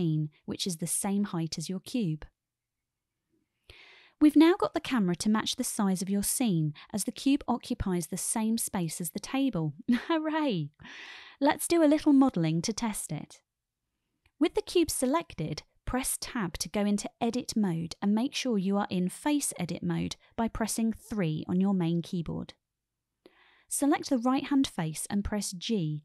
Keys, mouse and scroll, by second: 9.2-10.0 shift+middle drag, 10.4-11.1 shift+middle drag, 16.4 Tab, 21.1 3.